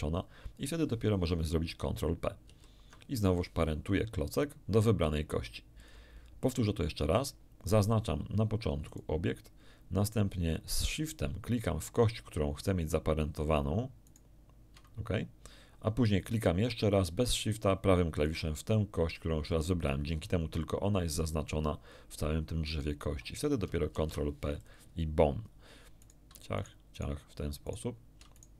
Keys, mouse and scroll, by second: 2.4 ctrl+p, 5.8 click, 8.8 right click, 14.0 shift+right click, 18.2 right click, 23.9 ctrl+p, 24.6 ctrl+click, 26.0 right click, 26.5 shift+right click, 26.9 shift+right click, 27.6 shift+right click, 28.3 shift+right click.